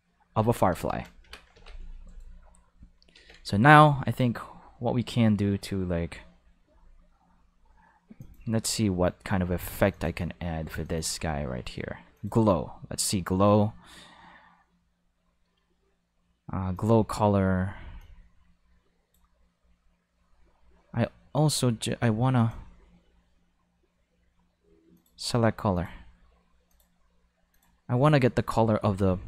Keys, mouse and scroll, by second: 0.5 space, 0.7 5, 1.5 ctrl+5, 3.1 ctrl+5, 8.2 click, 9.9 click, 10.8 click, 12.1 click, 16.7 click, 18.0-19.1 drag, 21.3 click, 22.4 click, 24.9 click, 25.7 click, 26.7 click, 27.5 click, 27.9 right click.